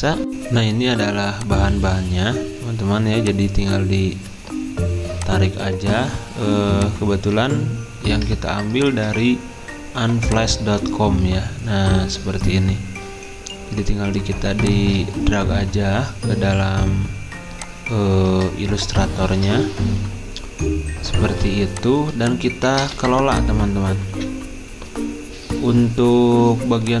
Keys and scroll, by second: 0.2 F9, 18.3 alt+Tab, 21.2 z, 22.8 typing.